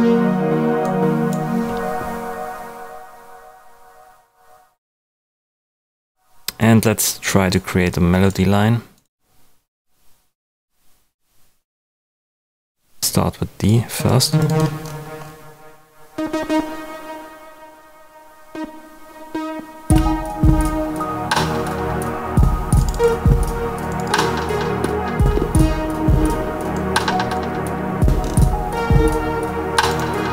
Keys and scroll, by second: 19.8 space.